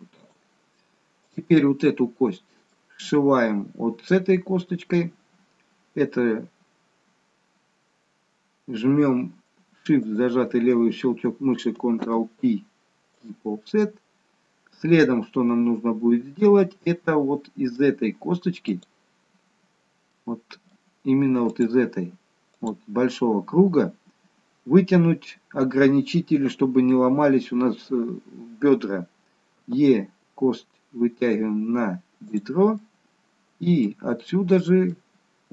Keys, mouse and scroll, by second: 1.2 click, 1.8 middle click, 10.1 shift+click, 12.0 ctrl+p, 13.8 middle click, 18.8 click, 20.1 middle click, 20.9-21.5 scroll up 1, 21.5 click, 21.5-22.5 scroll up 1, 22.5 click, 29.7 e, 32.8 middle click, 34.3 middle click.